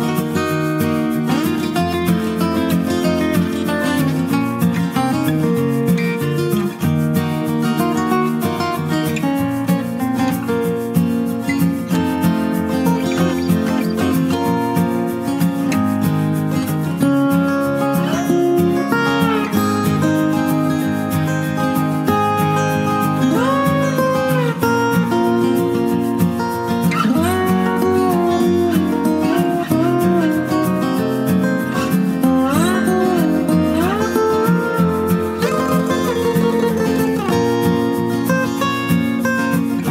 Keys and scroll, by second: 5.6 ctrl+space, 34.5 typing, 35.8 Return, 37.5-38.3 typing.